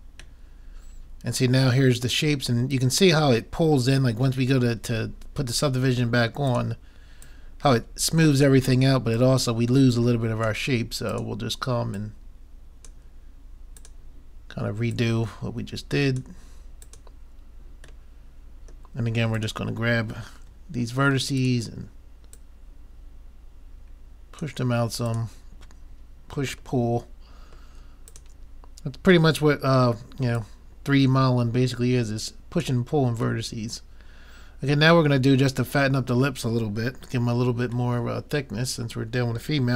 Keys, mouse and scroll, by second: 0.4 middle click, 6.6-10.9 drag, 11.2-13.7 drag, 13.8-16.6 drag, 16.9-18.1 drag, 18.1 middle click, 19.4-21.2 drag, 21.4-24.1 drag, 25.1-26.9 drag, 26.8 middle click, 28.2-29.9 drag, 28.2 middle click, 29.4 middle click, 30.4-32.1 drag, 30.4 middle click, 33.5-35.4 middle drag, 38.0-39.7 middle drag.